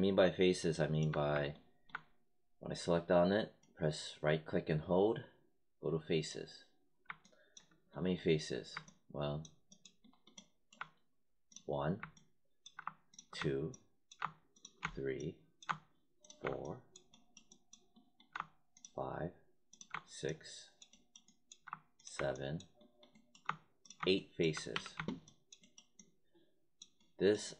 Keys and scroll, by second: 24.6 w.